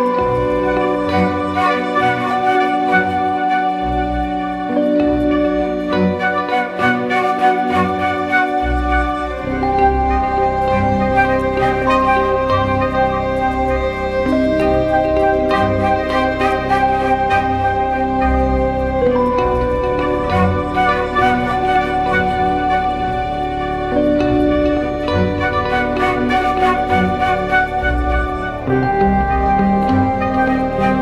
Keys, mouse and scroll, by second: 20.0 double click, 22.5-24.0 typing, 30.6-31.0 typing.